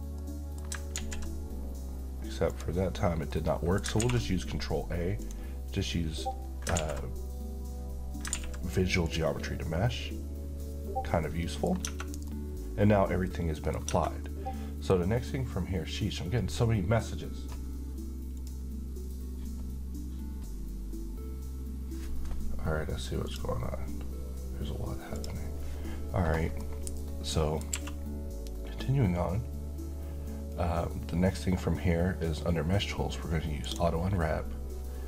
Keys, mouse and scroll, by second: 0.1-0.8 middle click, 0.9 z, 1.8 scroll down 1, 2.5 click, 3.0 scroll down 1, 3.3-3.9 middle click, 4.0 ctrl+a, 5.2 click, 6.7 a, 8.3 ctrl+a, 9.0 click, 11.3-11.8 middle click, 11.8 Tab, 12.3-13.8 middle drag, 13.9 Tab, 14.2-15.2 middle drag, 18.3 click, 23.3 click, 26.6-27.8 middle click, 27.7 q, 33.7 click.